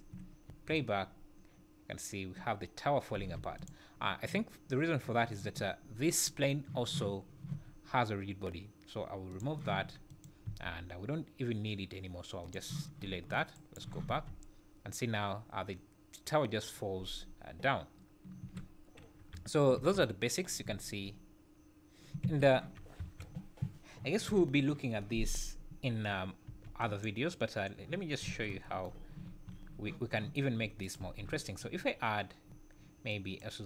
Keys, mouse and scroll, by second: 0.5 space, 3.2 space, 3.6 click, 9.3 click, 10.1 click, 10.4 x, 13.5 shift+right click, 14.1 space, 18.4 Escape, 19.2 KP_1, 19.7 space, 20.6 `, 22.2 Escape, 23.0 KP_1, 24.2 z, 26.4 b, 28.3 alt+a, 29.2 shift+a, 30.8 shift+right click, 31.0 shift+a.